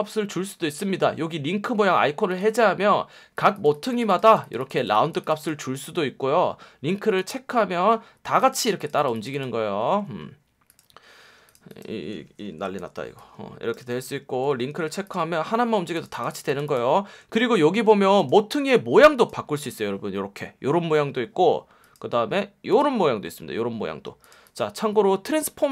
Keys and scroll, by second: 3.1 F1, 12.5 BackSpace, 12.7 m, 14.3 v, 17.3 F1, 24.0 F1.